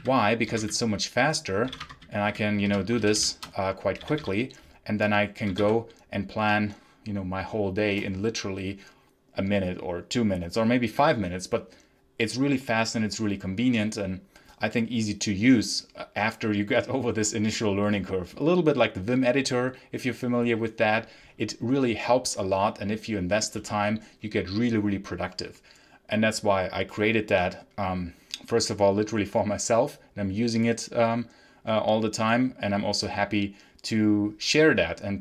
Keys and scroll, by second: 0.0-2.5 typing, 1.7 Return, 3.9 k, 5.1-6.0 typing.